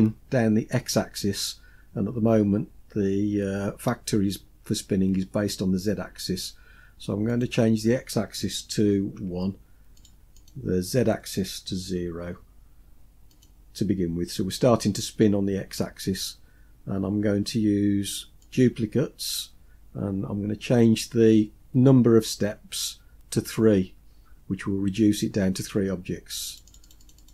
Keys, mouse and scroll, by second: 7.4-10.1 drag, 10.4-13.5 drag, 18.5 click, 25.6 click, 26.6 click, 26.7 click, 26.9 click, 27.1 click, 27.2 click.